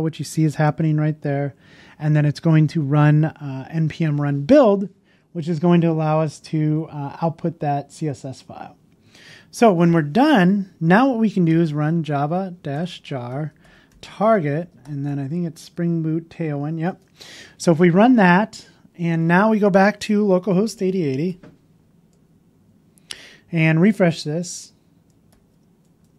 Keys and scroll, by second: 21.3 super+Tab, 23.8 super+r.